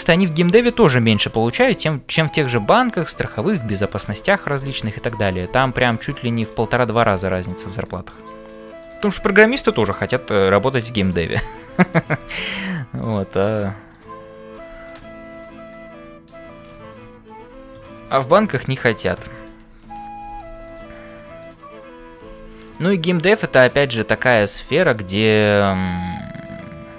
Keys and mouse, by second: 1.2 shift+middle click, 2.0 click, 4.4 middle click, 4.8 click, 6.4 click, 7.0 g, 7.9 middle click, 8.8 click, 9.6 f, 10.0-11.2 middle drag, 11.7 shift+middle click, 12.3 f, 12.8 middle click, 13.9 click, 14.6 g, 15.7 middle click, 17.3 ctrl+r, 19.3 click, 20.2 g, 22.2 g, 25.5 middle click, 26.3 click.